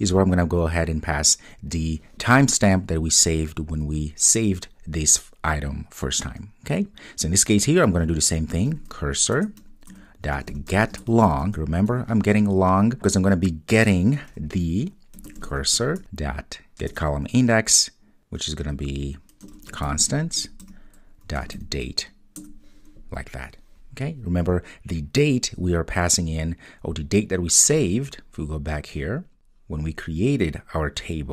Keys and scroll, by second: 9.4 Return, 15.8 Return, 17.0 Return, 20.4 Return.